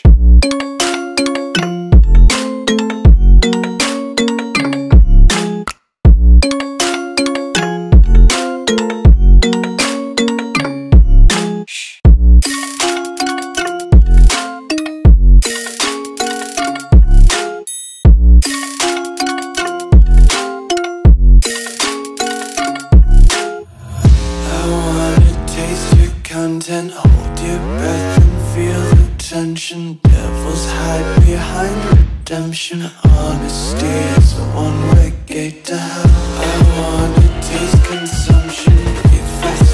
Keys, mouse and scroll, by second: 0.0 a, 1.2 BackSpace, 1.4 ctrl+a, 2.2 click, 10.1 Left, 12.0 Right, 12.3 click, 12.7-13.4 scroll down 1, 13.4 click, 19.8 click, 20.9 alt+scroll up 2, 21.5 click, 23.8 ctrl+z, 24.3 shift+click, 25.0 click, 26.9 click, 27.1 shift+click, 28.1-28.9 scroll down 3, 29.6 click, 31.1 click, 32.7-37.0 typing, 38.1 click.